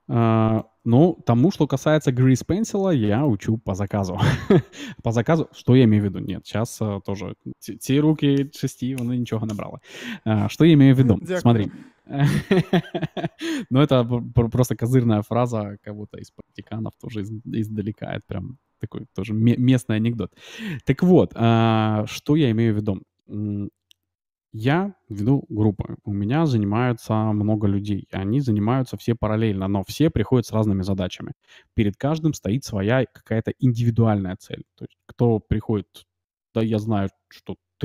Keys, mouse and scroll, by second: 0.0-0.7 d, 1.3 d, 2.0 d, 2.1 d, 3.7 d, 4.2 d, 4.3 d.